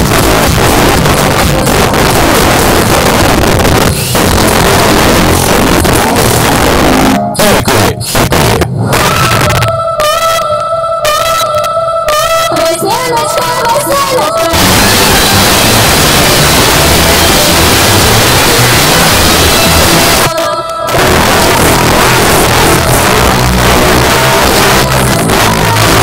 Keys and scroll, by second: 0.0 Down, 0.3 Down, 0.5 Down, 0.9 Return, 20.1 Page_Down.